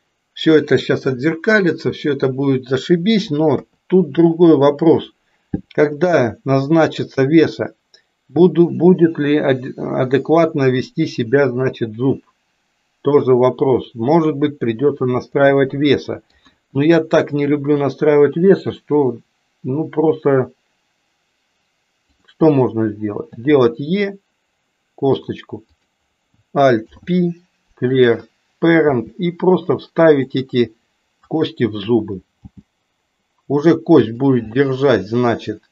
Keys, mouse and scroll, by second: 3.5 KP_3, 15.9 middle click, 16.5 KP_1, 23.4 e, 25.7 click, 26.8 alt+p, 28.9 g, 32.4 g, 34.5-35.7 middle drag.